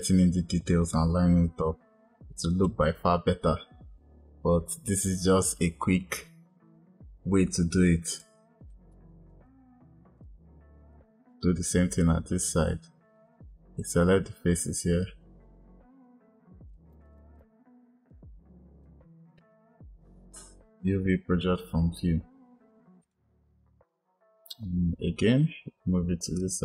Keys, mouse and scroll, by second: 2.7 click, 8.2 click, 10.2 click, 13.6 click, 16.7 shift+click, 16.8 shift+click, 17.0 shift+click, 17.1 shift+click, 17.3 shift+click, 18.8 shift+click, 22.9-25.2 drag.